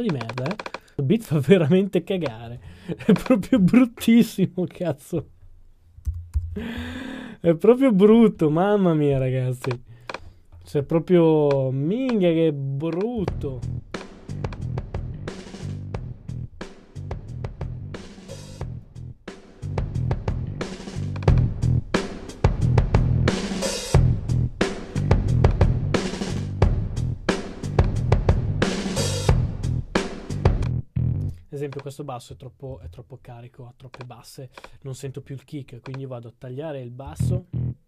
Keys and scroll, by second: 5.8-7.3 typing, 8.5 a, 32.4-33.2 typing, 34.2-35.0 typing.